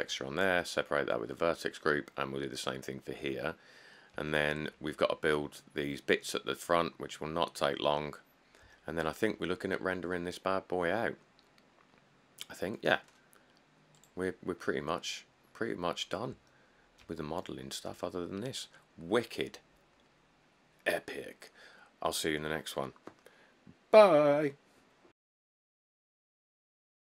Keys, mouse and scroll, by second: 3.5-4.1 scroll, 5.9 middle click, 6.0 scroll, 6.7-7.7 middle click, 7.5 middle click, 8.4 middle click, 8.5 middle click, 15.1 middle click, 15.1 middle click, 15.6 middle click, 15.7 middle click, 16.2 middle click, 16.3 middle click.